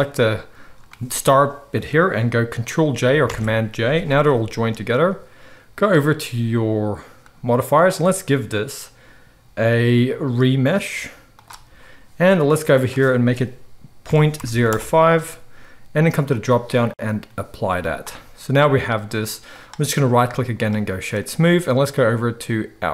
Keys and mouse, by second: 3.3 ctrl+j, 4.3 click, 4.3 g, 4.9-5.9 middle drag, 5.9 click, 6.0-7.6 middle drag, 7.6-22.9 drag, 17.8 z, 19.5-22.9 middle drag, 19.5-22.9 right drag.